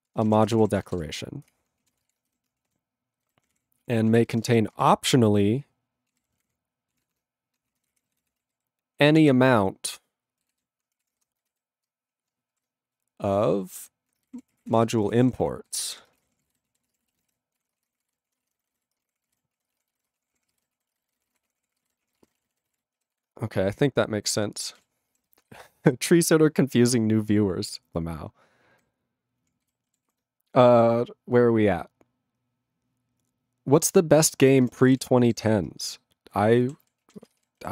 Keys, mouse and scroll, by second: 0.0-2.3 typing, 2.0 ctrl+space, 2.0 ctrl+e, 2.1 ctrl+g, 2.7 ctrl+a, 3.3 ctrl+n, 3.5 ctrl+o, 3.5 Tab, 3.9 ctrl+p, 4.1 ctrl+a, 4.2 ctrl+space, 4.3 ctrl+n, 4.8 ctrl+alt+w, 6.1 ctrl+a, 6.2 ctrl+k, 6.4 ctrl+p, 6.9 ctrl+e, 7.2-9.6 typing, 7.8 ctrl+a, 7.9 ctrl+o, 10.6 alt+b, 11.1 ctrl+e, 11.2 ,, 11.5 ctrl+n, 11.5 ctrl+b, 12.5-15.8 typing, 16.0 ctrl+e, 16.1 ctrl+space, 16.2 ctrl+a, 16.3 ctrl+p, 16.4 ctrl+g, 16.5 ctrl+e, 16.7 ctrl+a, 16.8 ctrl+space, 16.9 ctrl+e, 16.9 ctrl+n, 17.0 ctrl+e, 17.2 ctrl+n, 17.2 ctrl+e, 17.3 ctrl+g, 17.6 ctrl+p, 17.7 ctrl+space, 17.8 ctrl+a, 17.9 ctrl+p, 18.0 ctrl+g, 18.1 ctrl+e, 18.3 ctrl+a, 18.4 ctrl+space, 18.5 ctrl+n, 18.8 ctrl+g, 19.0 ctrl+space, 19.0 ctrl+a, 19.1 ctrl+p, 19.3 ctrl+g, 19.3 ctrl+e, 19.6 ctrl+a, 19.7 ctrl+space, 19.8 ctrl+e, 19.9 ctrl+n, 20.0 ctrl+e, 20.1 ctrl+space, 20.2 ctrl+a, 20.3 ctrl+p, 20.5 ctrl+g, 20.6 ctrl+e, 20.8 ctrl+a, 20.8 ctrl+space, 20.9 ctrl+e, 21.0 ctrl+n, 21.1 ctrl+e, 21.2 ctrl+n, 21.3 ctrl+e, 21.3 ctrl+g, 21.4 ctrl+space, 21.5 ctrl+a, 21.6 ctrl+p, 21.8 ctrl+g, 21.8 ctrl+e, 22.1 ctrl+a, 22.2 ctrl+n, 22.4 ctrl+e, 22.5 ctrl+n, 22.5 ctrl+e, 22.6 ctrl+n, 22.7 ctrl+e, 22.7 ctrl+g, 23.2 ctrl+s, 29.7 ctrl+g, 30.1 ctrl+s, 34.2 ctrl+e, 34.5 ctrl+space, 34.6 ctrl+a, 34.9 ctrl+g, 34.9 ctrl+e, 35.5 ctrl+s, 36.8 ctrl+s, 37.0 ctrl+a, 37.2 ctrl+space, 37.3 ctrl+e, 37.4 ctrl+g.